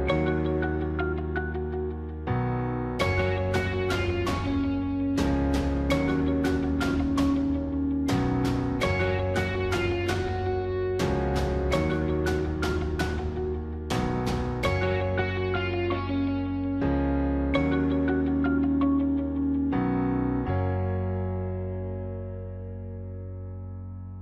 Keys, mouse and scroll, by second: 1.9 ctrl+-, 2.3 ctrl++, 5.3 ctrl++, 6.2 ctrl++, 7.8 ctrl++, 8.0 ctrl+-, 8.5 ctrl++, 10.1 right click, 11.2 ctrl++, 11.9 ctrl+-, 19.6 ctrl+-.